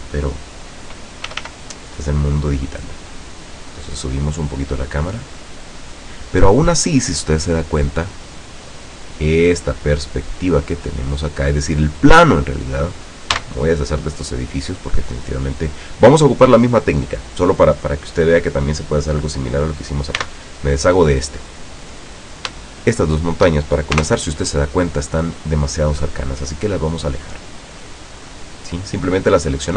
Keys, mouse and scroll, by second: 1.3 r, 6.0 click, 8.4 middle click, 9.2 scroll down 1, 9.9 right click, 10.9-11.8 middle drag, 12.5 right click, 13.5 x, 13.9 click, 15.3 right click, 15.8 right click, 17.3 right click, 20.3 x, 20.6 click, 21.6 right click, 22.2 right click, 22.9 shift+right click, 24.1 shift+KP_0, 26.4 middle click, 27.0 middle click, 28.2 scroll down 1, 28.5-29.1 middle drag.